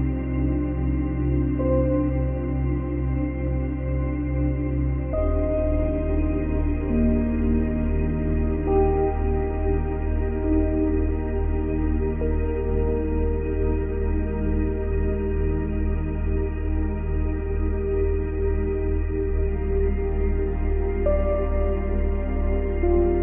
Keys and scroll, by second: 4.0 space, 6.7 space, 10.4 space, 11.4 space, 12.6 space, 17.5 space, 21.2 space, 23.1 space.